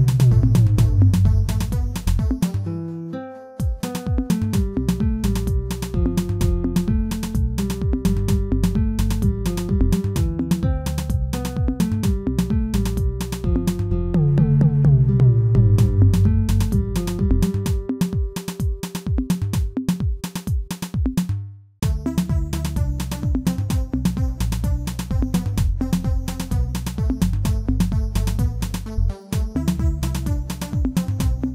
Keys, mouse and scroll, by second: 1.2 KP_1, 1.7-2.3 scroll up 1, 2.3 shift+z, 2.4 shift+middle click, 2.9-3.5 scroll up 1, 3.5 s, 11.5 scroll down 1, 11.7 middle click, 12.4 shift+z, 12.9 shift+middle click, 13.5 scroll up 1, 13.7 middle click, 15.5 click, 15.6 middle click, 16.2 middle click, 16.9 ctrl+click, 17.1 middle click, 17.6 middle click, 18.5 ctrl+shift+click, 18.8 middle click, 19.9 middle click, 20.6 Tab, 21.6 shift+h, 21.9-22.4 middle drag, 22.4 Tab, 23.5 ctrl+shift+click, 23.8-25.0 middle drag, 25.0 ctrl+shift+click, 25.6 shift+click, 26.1 x, 27.5-28.6 middle drag, 28.6 1, 29.3 alt+click, 29.8-30.9 shift+middle drag, 30.9 shift+click, 31.4 shift+click.